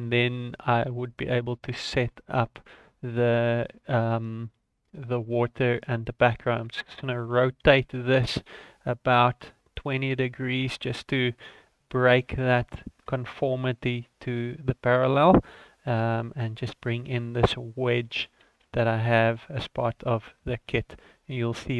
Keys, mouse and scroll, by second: 1.2-1.8 scroll down 1, 1.8-2.4 scroll down 4, 2.4-3.0 scroll up 2, 3.0 right click, 3.3 scroll down 2, 3.6 shift+middle click, 5.0-5.7 scroll up 1, 5.7 click, 7.0 shift+middle click, 7.7 r, 10.6 g, 12.1 scroll down 2, 12.3 shift+middle click, 12.7 scroll down 1, 13.2 shift+middle click, 13.9 right click, 14.3-15.0 scroll up 2, 15.0 click, 15.5-15.8 scroll down 5, 15.9 shift+middle click, 16.8 shift+d, 18.7 ctrl+z, 18.8 scroll up 3, 19.1 shift+middle click, 20.5 shift+middle click, 20.8-21.5 scroll up 5.